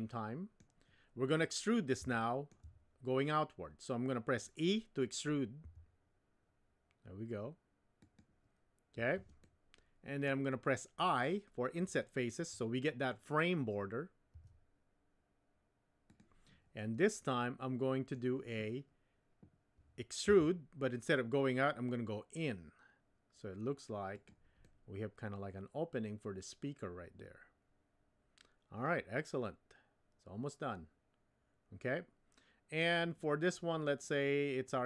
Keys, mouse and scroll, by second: 2.1 shift+middle click, 5.6 e, 9.5 middle click, 14.3 i, 16.8-18.2 middle drag, 20.3 e, 24.7-32.8 middle drag.